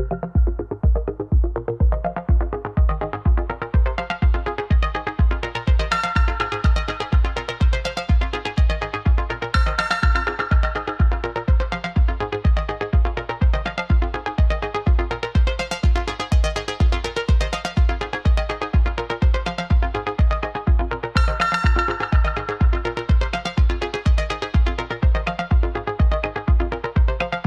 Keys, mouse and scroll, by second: 0.7 click, 0.9 r, 2.7 drag, 2.9-5.0 middle drag, 5.3 click, 5.6 click, 6.0-9.6 middle drag, 10.0-12.1 middle drag, 12.5 shift+a, 15.5-15.9 drag, 17.4-18.4 middle drag, 18.5-19.2 drag, 20.8-21.3 drag, 22.1-22.5 drag, 22.5-23.1 middle drag, 23.1 click, 24.2 drag, 24.3-25.9 middle drag, 25.9 click, 26.1-26.8 middle drag, 26.8 ctrl+s.